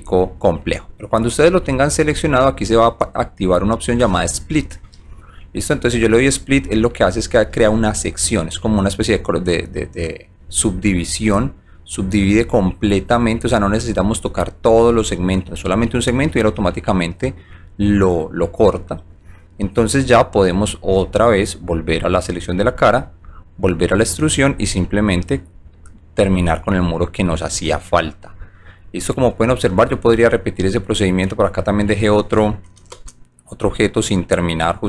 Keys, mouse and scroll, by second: 0.7 alt+click, 6.2 click, 7.0 right click, 7.5-9.6 alt+drag, 10.6 alt+middle click, 11.4 alt+click, 12.5 alt+right click, 13.1-14.7 alt+middle drag, 15.0 alt+right click, 16.8-18.9 alt+drag, 21.7 click, 23.2 click, 24.4 click, 25.9 alt+click, 26.4 alt+right click, 27.0 alt+middle click, 27.7 alt+click, 28.2 alt+middle click, 29.0 alt+middle click, 29.7 alt+click, 30.4 alt+middle click, 33.6 shift+click, 33.7 1, 34.1 alt+click.